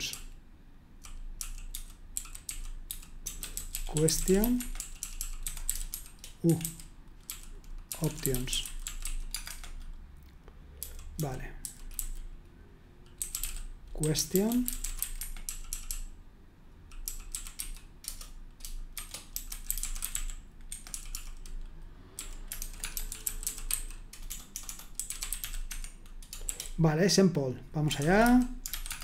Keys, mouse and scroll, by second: 0.1-9.5 typing, 10.5-26.5 typing, 27.8-29.0 typing.